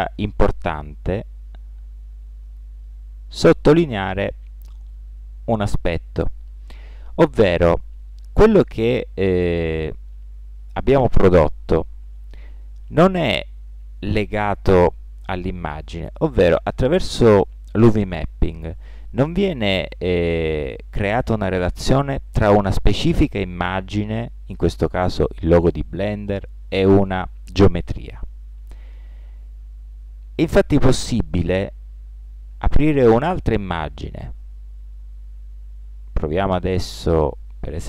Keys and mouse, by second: 1.0 g, 34.3-35.9 drag.